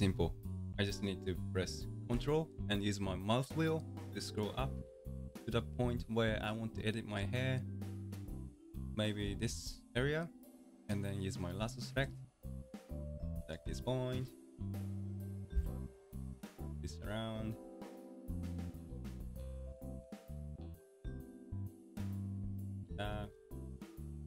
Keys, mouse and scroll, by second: 4.2-4.8 ctrl+scroll up 1, 4.8-5.3 ctrl+scroll down 1, 5.3-6.4 ctrl+scroll up 2, 6.4-7.0 ctrl+scroll up 1, 7.0-8.2 ctrl+scroll up 1, 8.2-8.6 ctrl+scroll up 1, 8.6-9.6 ctrl+scroll down 1, 9.6-12.0 middle drag, 12.0 ctrl+click, 13.9-15.5 middle drag, 15.5 g, 23.2-24.2 middle drag.